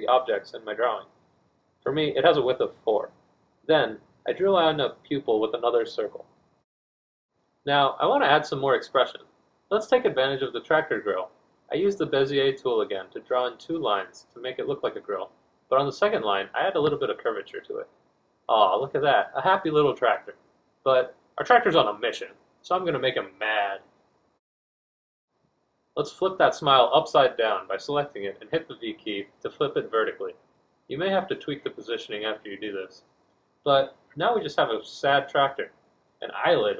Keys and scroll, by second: 9.4 b, 11.7 F1, 12.8 4, 14.9 f, 16.7 F2, 17.7 b, 18.1 F2, 18.6 b, 20.2 F1, 20.9 z, 21.9 F2, 24.4 F1, 26.6 v, 34.7 b.